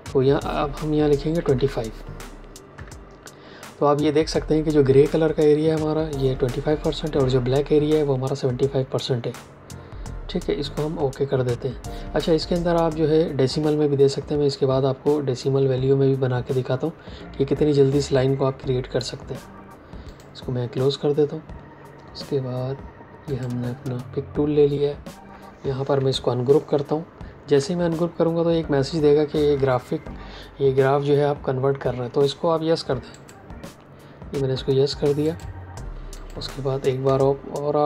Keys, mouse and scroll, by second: 1.3 KP_2, 1.5 KP_5, 2.6 KP_Enter, 20.0 click, 23.2 click, 26.6 ctrl+shift+g, 33.0 click.